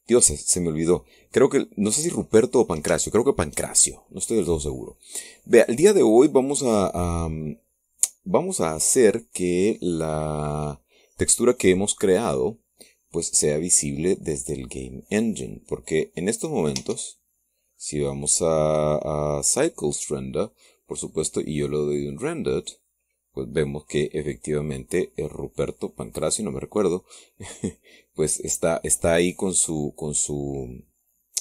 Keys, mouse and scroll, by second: 2.6 scroll down 2, 3.6 shift+click, 4.3-5.9 shift+drag, 6.1 scroll down 2, 6.5-6.8 scroll up 2, 7.4-9.1 drag, 17.4 Tab, 21.8 click, 22.8 click, 26.9 click, 29.0 click.